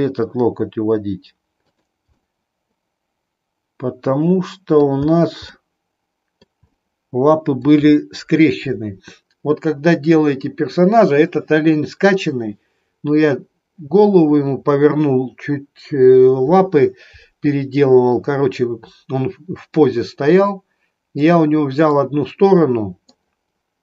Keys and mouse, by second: 2.3-4.9 middle drag, 5.6-6.6 middle drag, 6.8-7.8 middle drag, 21.8-23.3 middle drag.